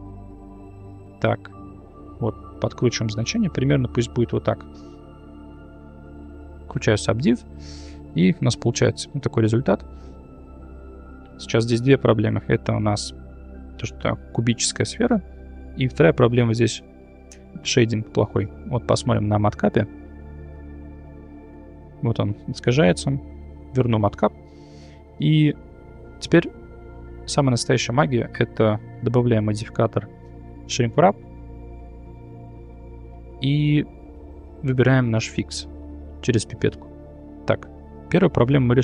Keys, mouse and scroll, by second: 0.3 click, 1.2 click, 2.1-3.9 shift+drag, 4.5 middle click, 5.6 click, 6.7 click, 7.4 Tab, 8.0 shift+z, 8.4-8.9 middle drag, 9.1 Tab, 10.2 middle drag, 11.3 shift+middle drag, 13.2-13.6 middle drag, 15.1-15.5 middle drag, 19.6-20.9 drag, 23.2-24.5 drag, 24.6-24.9 middle drag, 26.2 shift+middle click, 28.9-31.0 drag, 34.9 click, 37.5 middle click.